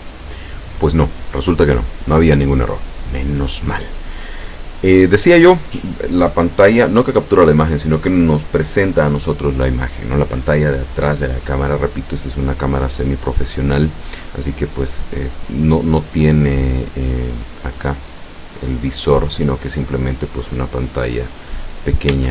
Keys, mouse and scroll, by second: 0.0 click, 2.0 click, 22.2 Tab.